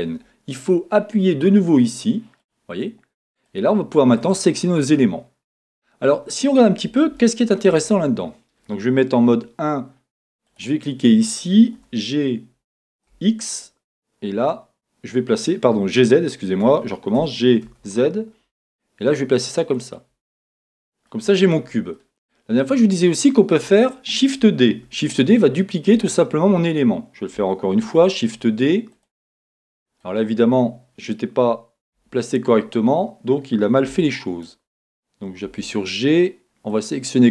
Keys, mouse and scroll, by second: 2.4 click, 3.5 click, 4.2 click, 5.6-7.2 scroll down 2, 5.7-10.5 middle drag, 7.8-9.3 scroll up 2, 9.3 KP_1, 10.5 click, 11.8 g, 16.8 Escape, 17.2 g, 19.9 click, 20.4-21.5 middle drag, 21.5-21.9 scroll down 2, 21.7-23.4 middle drag, 23.5-24.8 middle drag, 24.8 shift+d, 25.9 middle click, 26.1 click, 27.7-33.9 middle drag, 27.7 shift+d, 29.0 click, 31.9 KP_1, 33.9 g, 34.4 click, 35.4 g.